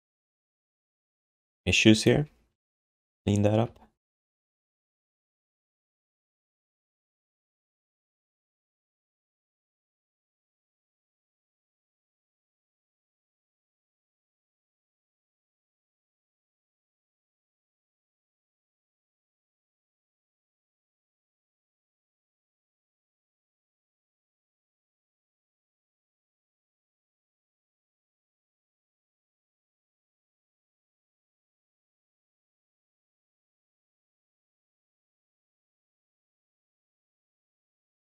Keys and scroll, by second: 0.0 g, 2.1 g, 2.9 q, 3.6 3, 4.7 1, 6.4 alt+shift+d, 11.5 3, 20.8 1, 24.1 Tab, 33.0 BackSpace, 33.4 BackSpace, 36.4 BackSpace.